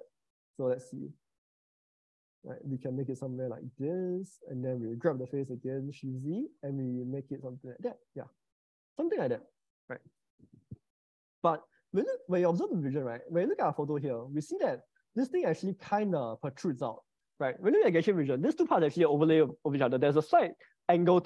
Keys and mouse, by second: 0.3 s, 1.5 shift+z, 4.2 click, 5.1 g, 5.9 shift+z, 8.2-9.7 middle drag, 12.7 click, 14.5 click, 14.9-16.9 middle drag.